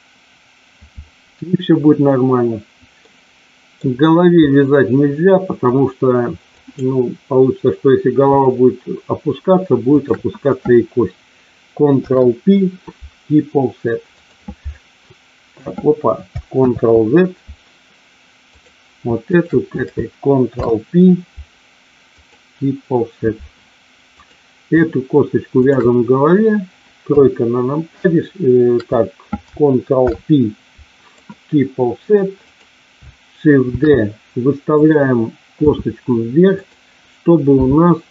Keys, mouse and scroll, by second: 3.0 middle click, 4.4-5.7 middle drag, 6.5 click, 9.8 shift+click, 11.9 ctrl+p, 16.5 ctrl+z, 18.5 click, 19.3 shift+click, 20.4 ctrl+p, 26.9 KP_3, 30.0 ctrl+p, 33.7 shift+d, 34.8 click, 35.5 s, 36.4 click, 37.5 r.